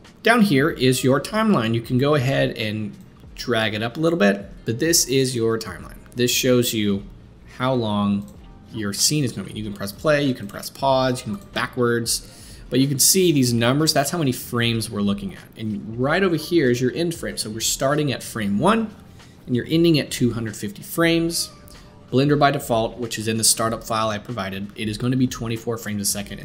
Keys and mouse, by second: 0.1-3.1 middle drag, 3.1-26.4 drag.